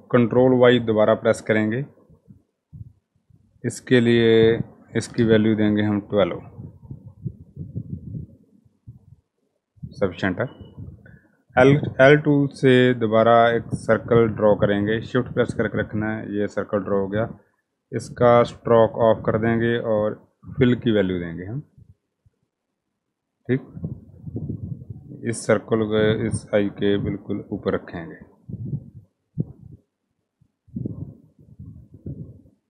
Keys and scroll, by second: 0.2 ctrl+y, 4.5-5.7 typing, 10.1-10.8 typing, 12.4 i.